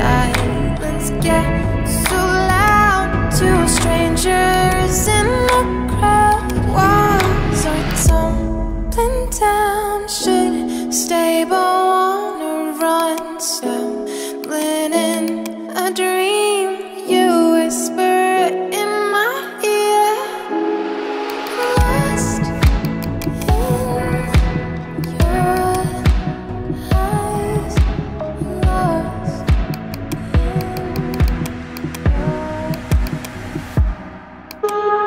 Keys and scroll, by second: 16.5-20.0 typing.